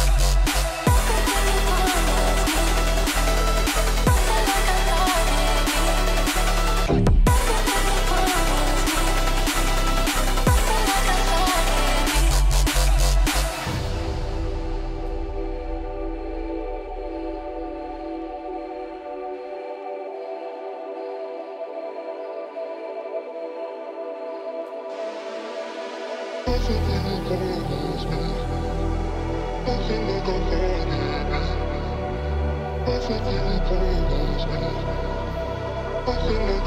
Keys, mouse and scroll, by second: 0.1 double click, 1.8 space, 1.9 right click, 2.7 double click, 3.7 ctrl+click, 4.2 double click, 8.3 shift+click, 9.0 shift+Page_Up, 10.1 shift+click, 11.3 shift+Page_Up, 12.1 shift+click, 15.9 shift+click, 16.0 typing, 16.4 ctrl+click, 18.1 shift+F2, 18.6 shift+F2, 19.5 shift+click, 19.7 right click, 23.3 right click, 24.1 F2, 25.9 ctrl+click, 29.3 double click, 30.0 Return, 30.1 shift+right click, 30.2 Delete, 32.2 shift+click, 32.3 typing, 34.0 ctrl+k, 34.8 shift+click, 35.9 ctrl+z.